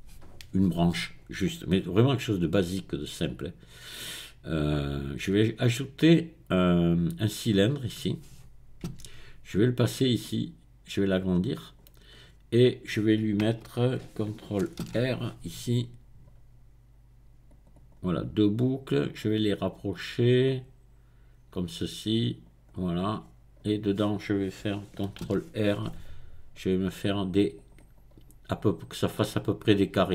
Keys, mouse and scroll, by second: 3.3 click, 3.6-6.2 middle drag, 7.2 click, 7.5-9.0 middle drag, 9.0 Tab, 10.2-12.1 drag, 12.2-13.3 scroll up 1, 14.8 ctrl+r, 15.8-16.4 scroll up 2, 16.4 scroll up 1, 17.5 click, 18.2-19.2 middle drag, 19.2-22.8 drag, 23.2-23.9 scroll up 1, 25.4 ctrl+r, 25.9-26.7 scroll up 2, 26.7-27.2 scroll up 1, 27.5 click.